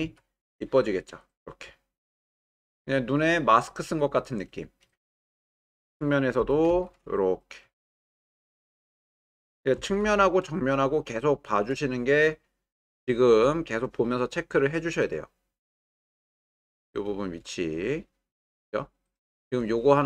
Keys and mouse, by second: 0.0 z, 5.0-5.4 shift+middle drag, 6.4 g, 6.7 y, 9.0 click, 9.8 g, 10.0 y, 11.4 shift+click, 16.1 click, 17.8 shift+middle click, 19.0 ctrl+middle click.